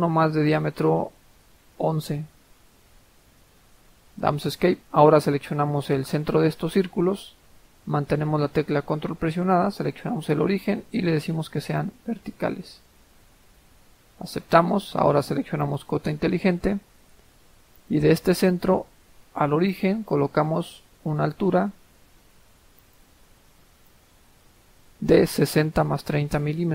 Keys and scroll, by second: 2.1-2.9 typing, 3.3 Escape, 4.2 Escape.